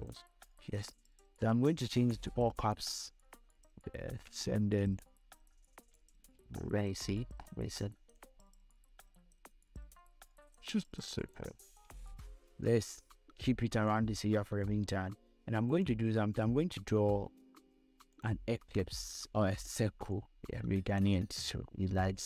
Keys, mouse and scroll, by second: 0.3 click, 1.6 v, 2.4 click, 5.2-6.7 shift+drag, 6.7 scroll down 1, 7.3 scroll up 1, 8.7-11.9 drag, 11.9 scroll down 1, 12.8 scroll up 1, 16.0 right click, 18.5-22.2 drag.